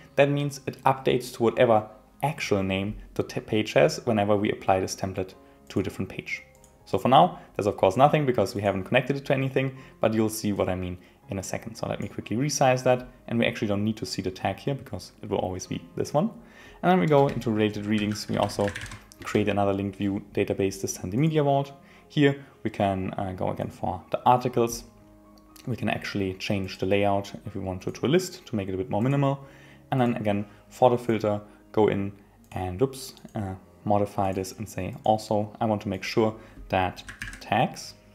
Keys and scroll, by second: 17.3 Return, 19.2 Return.